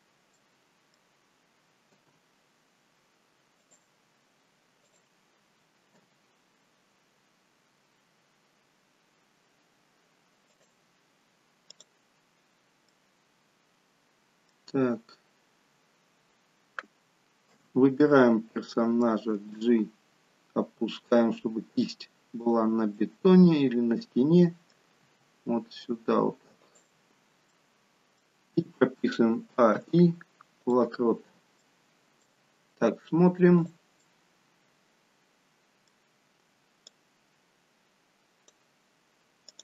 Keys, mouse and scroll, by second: 0.0-0.7 scroll down 2, 0.3 middle click, 1.8 g, 4.8 click, 5.9 g, 11.7 click, 12.8 middle click, 17.5 a, 19.4 g, 22.9 middle click, 25.1 g, 27.4 middle click, 29.4 a, 29.8 i, 31.1-32.0 scroll down 3, 31.6 middle click, 33.6 click, 34.0 middle click, 36.9 click.